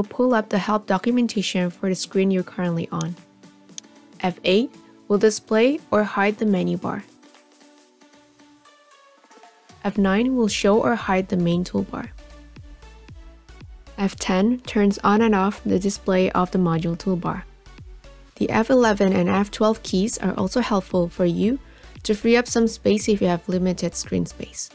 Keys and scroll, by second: 3.4 F8, 9.8 F9, 14.0 F10.